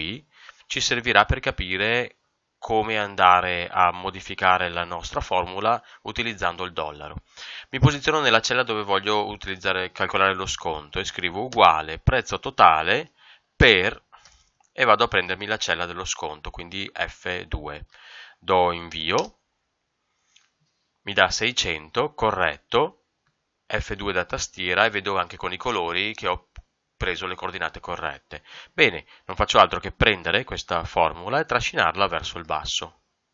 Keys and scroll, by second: 11.5 Left, 14.2 Up, 15.1 Right, 19.1 ctrl+Return, 23.2 F2, 28.5 Escape.